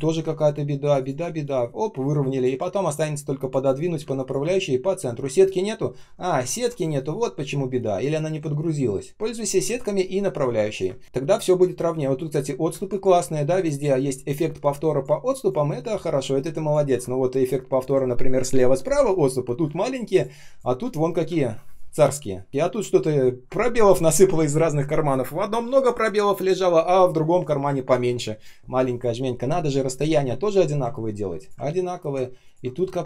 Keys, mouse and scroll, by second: 0.9 shift+click, 1.2 alt+h, 3.9 space, 4.4 ctrl+shift+3, 6.3-6.8 ctrl+scroll down 1, 6.8 ctrl+shift+4, 9.1 Delete, 10.4 ctrl+scroll down 1, 10.8 space, 11.0 space, 13.4 space, 13.9 space, 13.9 space, 15.1 space, 17.1 ctrl+scroll up 1, 19.6 space, 20.1 space, 20.1 space, 21.3 ctrl+scroll down 1, 21.5 space, 22.0 space, 22.1 space, 22.5 ctrl+scroll up 1, 30.3 ctrl+scroll down 1, 31.6 ctrl+scroll up 1.